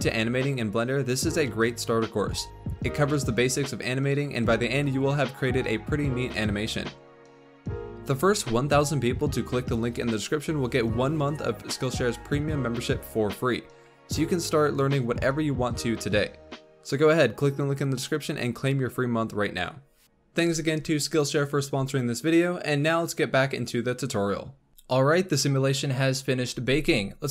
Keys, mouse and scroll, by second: 2.3 ctrl+s, 3.3-5.4 drag, 24.7 ctrl+s.